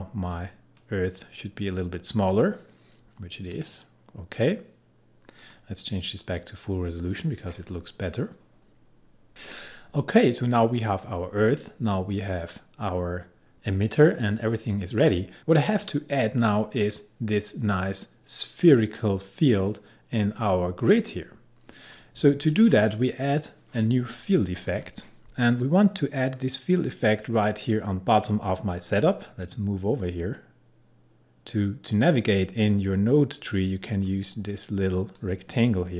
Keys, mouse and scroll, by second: 3.5-5.4 drag, 21.1-24.4 drag, 24.7-35.9 drag.